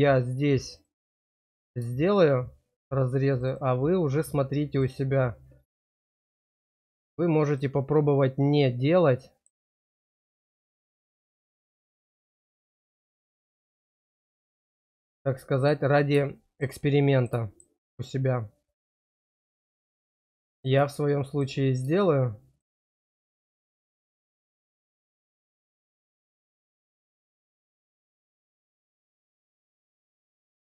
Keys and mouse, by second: 0.5 click, 0.7 click, 2.2 shift+click, 3.4 shift+click, 4.7 shift+click, 4.9 shift+click, 8.7 middle click, 10.4 click, 11.3 shift+click, 12.3 shift+click, 12.5 shift+click, 13.5 shift+click, 13.9 shift+click, 16.4 shift+middle click, 16.7 middle click, 17.4 shift+middle click, 18.6 click, 18.8 click, 20.3 shift+click, 20.5 shift+click, 21.1 shift+middle click, 22.4 shift+click, 22.6 shift+click, 23.8 shift+click, 24.0 shift+click, 25.9 middle click, 26.7 shift+middle click, 28.7 click, 29.7 shift+click, 29.9 shift+click.